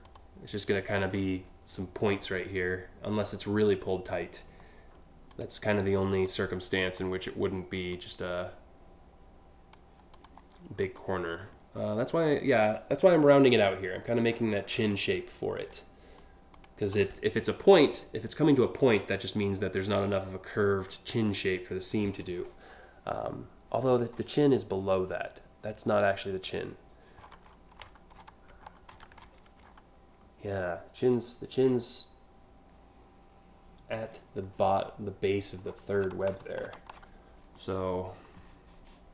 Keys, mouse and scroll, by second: 4.9 click, 5.8 click, 6.5 click, 7.5-9.4 drag, 9.7 click, 10.4-11.0 scroll down 3, 11.6 click, 12.6 click, 13.3 click, 14.4 click, 15.3 click, 16.2 click, 23.5-23.9 scroll up 2, 26.8-27.2 scroll up 4, 27.4-27.9 scroll down 2, 28.3-29.4 scroll up 6, 35.3-36.1 scroll down 3, 36.2 1, 36.6 5, 39.0 click.